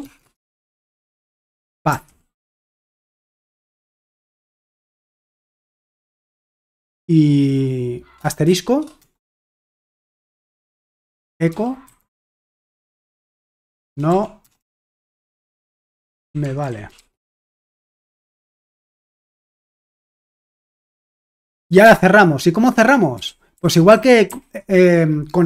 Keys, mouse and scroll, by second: 0.0-0.4 typing, 1.6-6.3 typing, 3.4 Return, 4.5 Tab, 5.7 Return, 8.5-9.0 typing, 10.1-20.4 typing, 11.0 Return, 18.0 Return, 21.8 BackSpace, 22.9-24.8 typing.